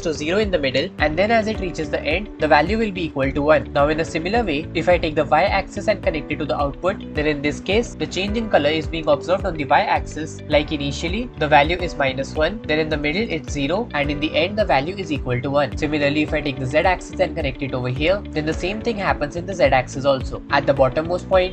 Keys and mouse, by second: 5.2-7.9 drag, 8.5-9.9 drag, 10.7-11.7 shift+middle drag, 12.6 shift+middle click, 17.1-17.9 middle drag, 18.6-19.1 drag, 19.1-21.5 middle drag.